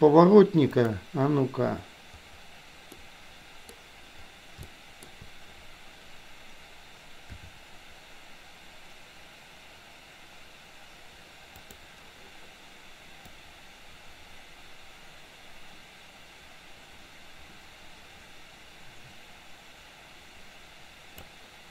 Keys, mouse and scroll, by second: 0.7 click, 3.1-4.0 middle drag, 4.7-5.2 shift+middle drag, 7.3 r, 13.3-21.5 drag.